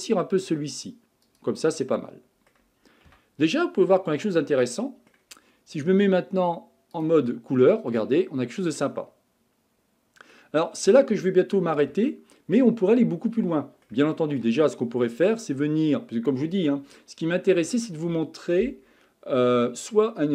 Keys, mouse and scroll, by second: 1.8-3.1 middle drag, 3.1 Tab, 3.6-6.6 middle drag, 7.0 click, 7.5-10.6 middle drag, 10.7-11.1 scroll down 4, 11.1-11.7 scroll up 5, 11.7-12.1 scroll down 3, 12.1-17.3 shift+middle drag.